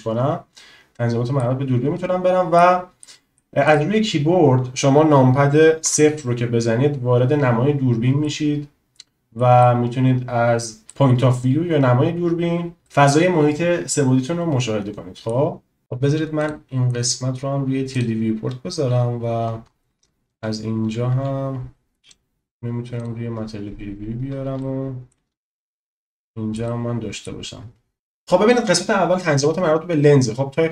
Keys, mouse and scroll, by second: 1.4-2.6 middle drag, 3.0 middle click, 3.6 click, 5.8 KP_0, 8.3 middle click, 9.7 middle click, 11.0 middle click, 12.9 click, 16.4-18.1 drag, 21.0 z, 24.7 shift+middle click, 25.9-26.5 shift+middle drag, 26.8 middle click.